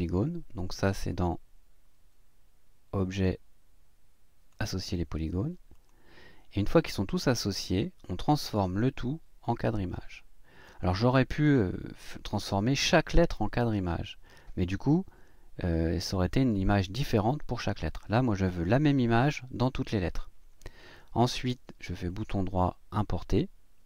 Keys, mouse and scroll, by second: 3.1 click, 4.5 click, 5.7 click, 7.7 click, 10.6 click, 22.1 click.